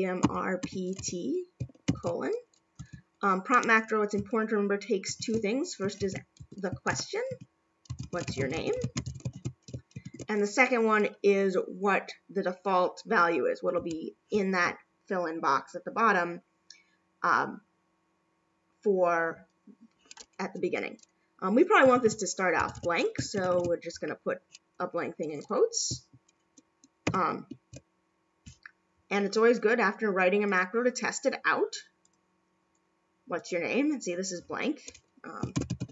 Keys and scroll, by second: 1.9 shift+;, 9.3 shift+/, 27.0 shift+0.